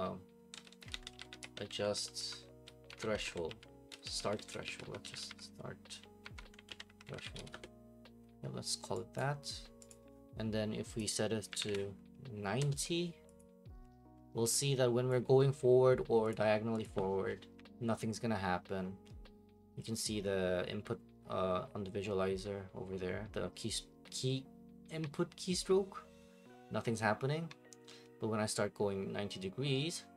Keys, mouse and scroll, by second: 0.0-7.9 typing, 9.2 click, 9.9 click, 11.0 click, 11.3-12.1 typing, 12.6 Return, 13.4 click, 15.1 click, 16.3 click, 16.8 click.